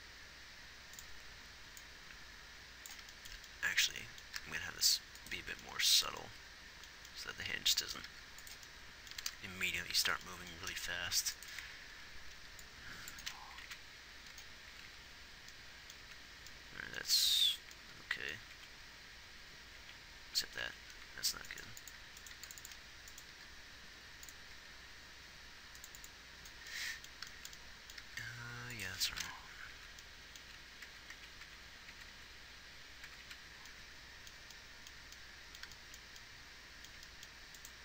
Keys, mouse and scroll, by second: 4.0 middle click, 4.8 g, 9.5 r, 11.1 g, 13.9 Right, 14.1 Right, 15.2 Left, 16.4 Left, 17.5 Right, 17.8 Right, 19.0 Right, 20.1 Right, 21.0 Right, 22.7 x, 23.6 g, 25.0 g, 30.0 Left, 30.0 g, 30.3 Left, 30.9 Left, 31.2 Right, 31.6 Right, 31.9 Right, 32.3 Right, 32.5 Right.